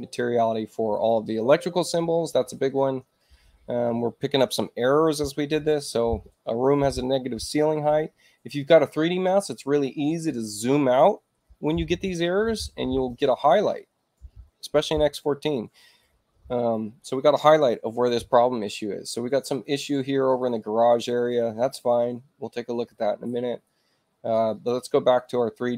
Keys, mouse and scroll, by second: 0.9 click, 21.5 click, 24.6 click.